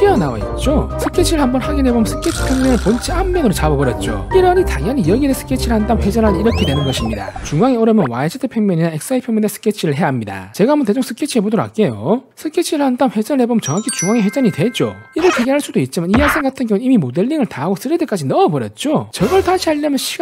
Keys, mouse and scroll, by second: 1.8 click, 2.3 s, 3.7 shift+middle click, 8.0 click, 9.4 click, 10.6 s, 11.0 scroll up 4, 11.5 click, 11.9 click, 12.2 click, 12.7 click, 13.2 click, 13.7 click, 14.5 click, 15.0 click, 15.3 alt+q, 15.9 shift+middle click, 16.6 middle click, 17.5 shift+middle click, 18.2-19.3 shift+middle drag, 19.4 shift+middle click.